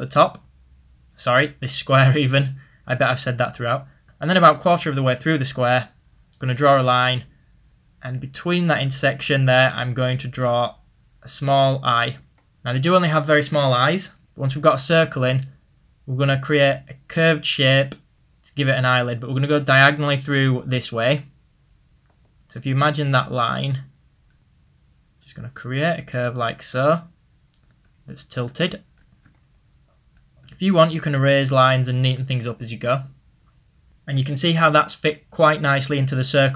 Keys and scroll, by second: 21.6 ctrl+z, 30.4 typing.